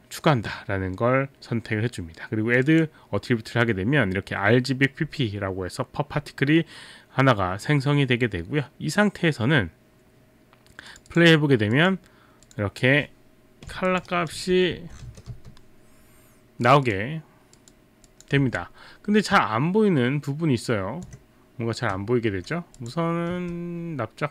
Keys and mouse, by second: 2.7 click, 10.9 click, 11.1 click, 11.7 click, 12.5 click, 13.9 alt+click, 14.1 alt+right click, 14.1-15.5 typing, 16.7 click, 16.9 click, 18.1 click, 22.1 alt+middle click, 22.8 click, 23.3 click, 23.3 r.